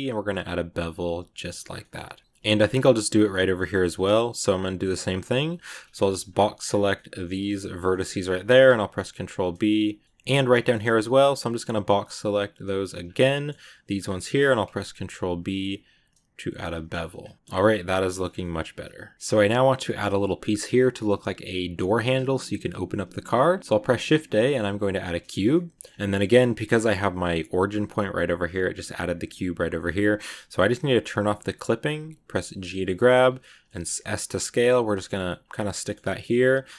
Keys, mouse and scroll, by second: 1.5 scroll down 1, 1.6 scroll up 1, 1.7 middle click, 1.9 z, 2.1 scroll down 3, 2.2 Tab, 2.3 shift+scroll up 4, 2.3 shift+middle click, 3.1 z, 3.7 middle click, 4.2 b, 5.6 KP_Decimal, 6.1-6.6 scroll down 10, 6.8-7.9 middle drag, 7.9 scroll up 3, 8.3 ctrl+b, 10.0 middle click, 10.4 scroll up 1, 10.7 b, 13.2 middle click, 13.8-14.2 scroll up 2, 14.3 ctrl+b, 16.5 z, 17.2 scroll down 1, 17.3 middle click, 18.1 Tab, 18.2 scroll down 1, 18.3 middle click, 22.7-23.4 scroll down 2, 23.4 shift+a, 25.2 scroll down 1, 25.4 middle click, 25.8 scroll up 1, 25.9 scroll down 1, 26.1 shift+scroll up 1, 26.6-29.6 middle drag, 31.1 click, 32.3 g, 34.7 g, 35.4-36.7 middle drag, 35.9 g.